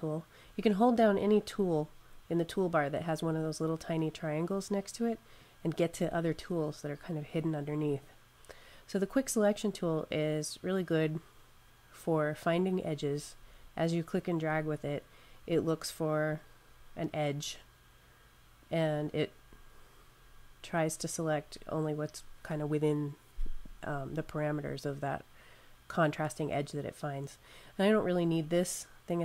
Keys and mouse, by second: 1.3 click, 5.2 click, 12.5 click.